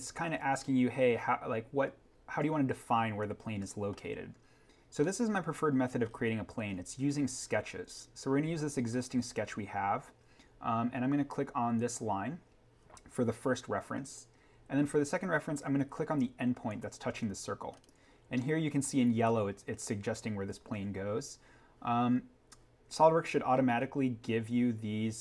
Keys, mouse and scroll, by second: 4.2-4.9 scroll down 1, 5.7-6.5 scroll, 8.3 scroll down 1, 11.7 click, 16.6 click, 17.6 scroll up 1, 18.6-20.9 scroll.